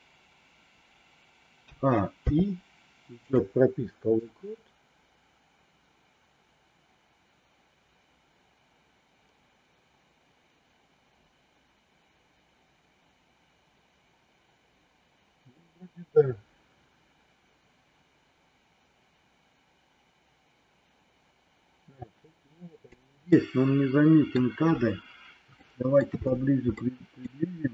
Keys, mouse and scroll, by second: 1.5 a, 2.1 i, 4.2-23.0 drag, 23.3 middle click, 25.5 shift+middle click, 26.8 middle click.